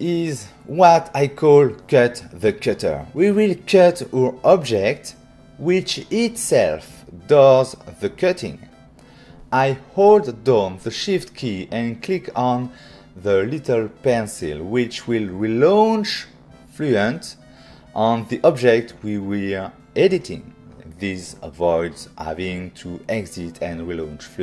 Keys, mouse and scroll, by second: 5.2 click, 7.2 click, 15.5 shift+click.